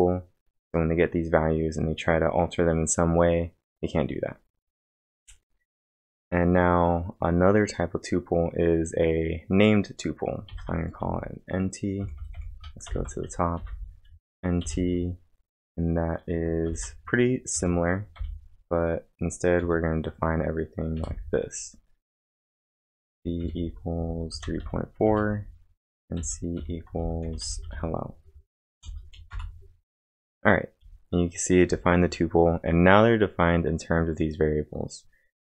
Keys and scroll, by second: 10.2-11.1 typing, 12.9 ctrl+l, 13.6 n, 14.1 space, 14.6 =, 14.8 space, 16.7-19.6 typing, 21.0 ,, 21.1 space, 23.1-25.3 typing, 26.8-28.8 typing, 29.3 Return.